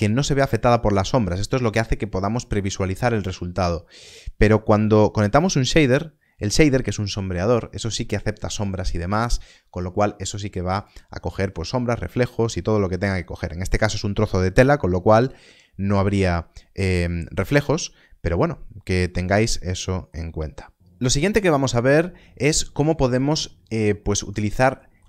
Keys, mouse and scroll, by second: 5.6 ctrl+shift+click, 19.3 middle click, 20.5 scroll up 1, 23.9 scroll up 1, 24.1 middle click, 24.4 scroll down 1, 24.7 shift+middle click.